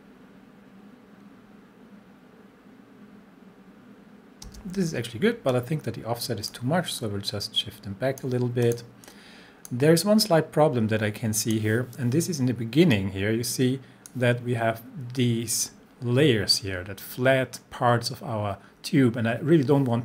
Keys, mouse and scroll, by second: 4.5 space, 5.5-6.8 drag.